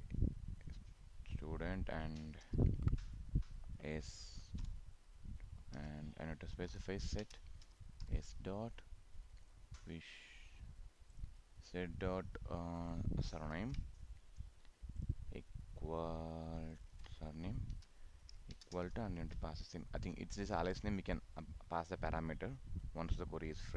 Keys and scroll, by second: 13.5 ctrl+c, 17.0 ctrl+v.